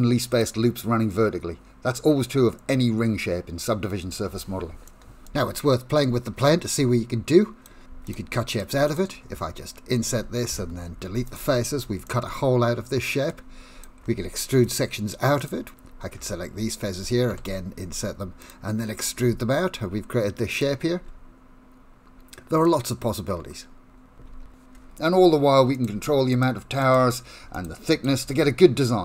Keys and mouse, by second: 4.9 shift+middle click, 5.5 middle click, 6.4 3, 6.6 shift+middle click, 7.6 click, 8.1 shift+click, 8.5 shift+click, 8.8 shift+click, 9.4 i, 10.6 x, 12.1-13.3 middle drag, 13.8 click, 14.7 shift+click, 15.4 shift+click, 17.4 i, 19.1 e, 21.0 Tab, 21.3-22.6 middle drag, 22.9-24.0 middle drag, 24.3 ctrl+z, 24.4 ctrl+z, 26.3 click, 26.8 click, 27.5 click, 28.0 click.